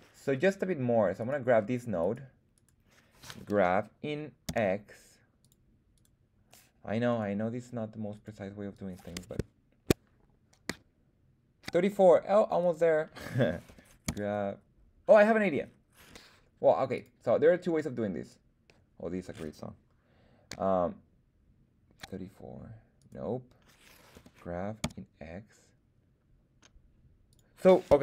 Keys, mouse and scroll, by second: 1.2 click, 1.2 right click, 2.0 click, 2.0 right click, 2.5 click, 2.5 right click, 3.4 g, 4.4 x, 5.4 click, 5.9 click, 5.9 right click, 7.1 click, 7.1 right click, 8.1 click, 8.1 right click, 8.7-11.6 drag, 12.6 click, 12.6 right click, 13.6 g, 14.0 x, 16.9 click, 18.2-22.0 drag, 23.0 right click, 24.1 g, 24.8 x, 27.3 click.